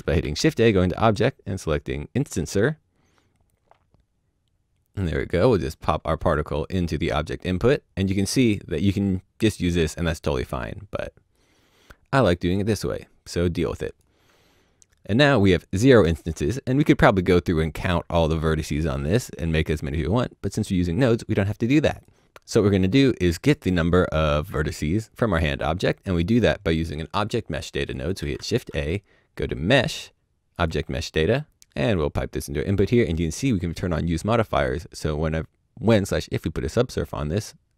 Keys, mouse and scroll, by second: 0.1 click, 0.2 shift+a, 2.2 a, 2.2 click, 4.9 click, 6.3 click, 6.6 click, 11.3 click, 20.5 click, 25.1 click, 28.2 shift+a, 30.5 click.